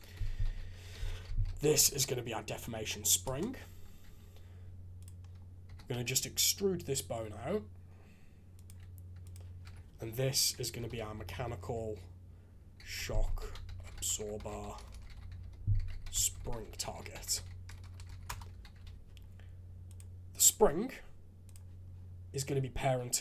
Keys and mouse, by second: 4.0 alt+a, 5.0 click, 5.6 e, 9.2 click, 9.6 F2, 14.9 BackSpace, 17.8 BackSpace, 17.9 BackSpace, 18.7 alt+a, 19.9 click, 21.4 click.